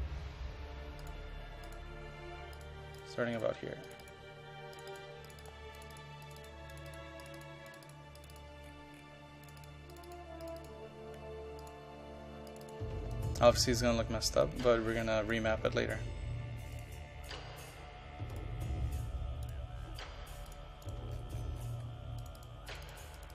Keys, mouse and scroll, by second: 0.3-1.1 scroll up 1, 1.1 click, 8.7-9.5 scroll down 1, 9.5 click, 13.3 click, 13.9 scroll down 2, 14.5 ctrl+click, 15.1 ctrl+click, 15.7-16.8 scroll up 1, 16.8 click, 21.2-22.3 scroll up 1, 22.3 click.